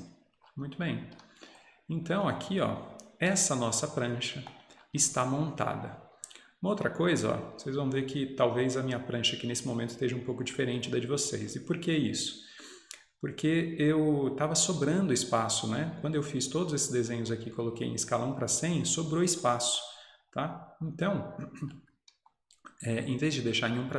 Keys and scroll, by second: 0.9 Escape.